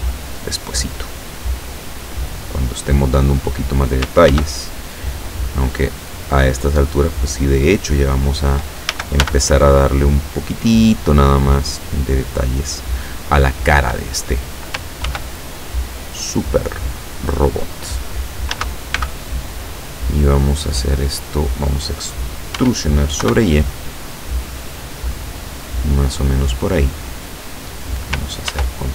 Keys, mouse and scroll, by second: 1.2-3.4 drag, 4.3 ctrl+r, 5.1 click, 8.1 click, 8.9 a, 9.3 b, 9.7 click, 11.5-12.8 drag, 15.1 ctrl+r, 15.7 click, 17.2 click, 18.6 a, 19.1 b, 19.8-20.9 drag, 22.7 e, 23.3 y, 26.3 click, 28.6 ctrl+r.